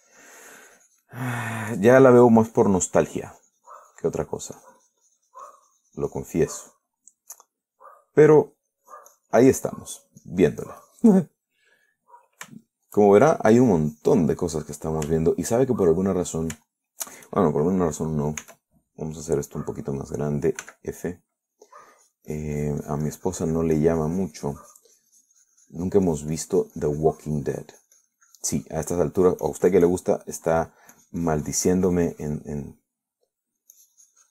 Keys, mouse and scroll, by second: 0.8 s, 1.1-5.6 drag, 2.5-3.0 scroll up 1, 3.0-4.6 scroll up 1, 5.8-8.2 drag, 8.2-10.0 middle drag, 10.1 click, 10.7 middle click, 11.2-12.4 drag, 12.4 middle click, 13.1 middle click, 13.8 shift+middle click, 14.4 shift+middle click, 14.8 shift+click, 15.7 middle click, 16.4-17.7 shift+middle drag, 17.9 shift+middle click, 19.7 s, 21.9 f, 22.7 click, 23.2-30.3 drag, 30.4 click, 31.4 middle click, 32.2-34.3 drag.